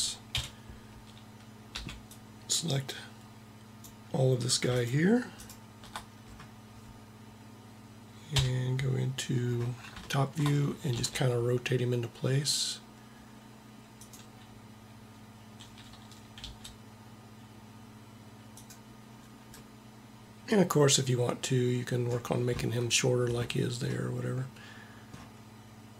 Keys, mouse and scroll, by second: 0.2 KP_1, 1.6 b, 3.9 b, 4.8-7.0 drag, 8.2 KP_7, 10.9 r, 16.4 g, 23.9-24.9 middle drag, 25.0 middle click.